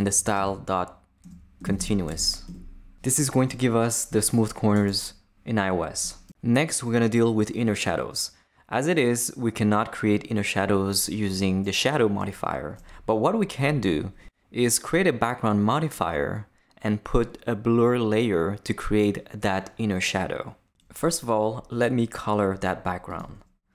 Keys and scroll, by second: 0.0-2.6 typing.